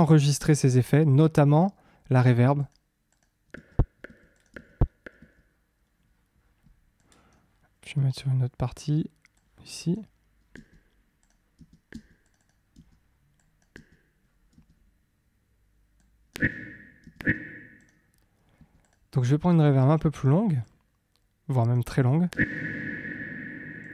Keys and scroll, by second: 3.5 space, 10.5 space, 16.3 space, 18.5 space, 22.3 space.